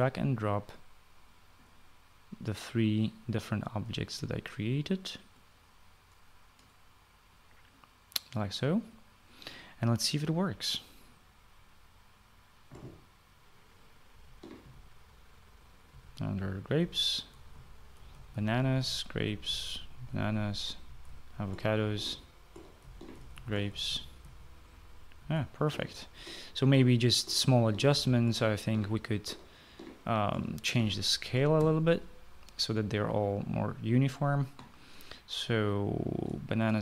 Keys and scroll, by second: 14.9-15.4 typing, 16.7-22.8 typing, 24.1-30.2 typing, 31.5 typing, 32.3 Escape.